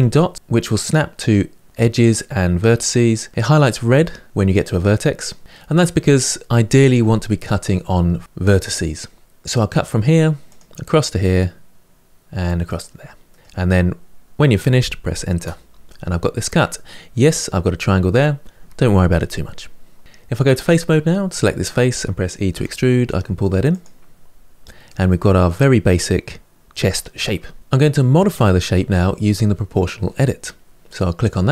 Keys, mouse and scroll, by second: 13.0-15.5 middle drag, 16.0-18.3 scroll up 2, 19.3-20.3 middle drag, 20.3 3, 21.1 click, 21.5 middle click, 22.3 e, 23.9-24.6 scroll down 3, 24.6-26.6 middle drag, 30.9 click.